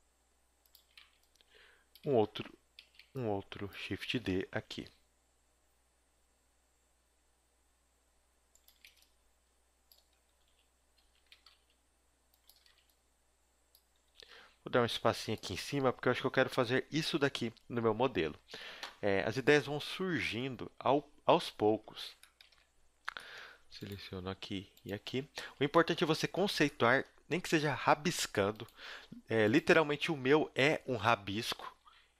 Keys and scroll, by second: 0.8 a, 1.0 b, 2.0 shift+d, 2.2 z, 2.8 z, 3.0 b, 4.1 shift+d, 8.7 a, 8.9 b, 10.2 g, 11.3 g, 12.5 a, 12.7 b, 13.9 g, 21.8 a, 25.4 a, 26.4 z, 30.0 shift+d, 31.8 KP_1.